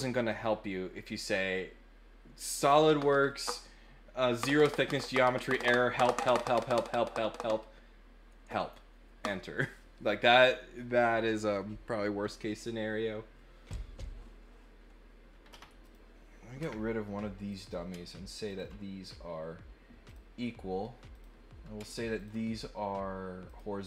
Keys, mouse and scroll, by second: 15.8 click, 17.5 click, 18.4 ctrl+click, 20.0 click, 21.1 click, 22.1 ctrl+click, 23.4 click.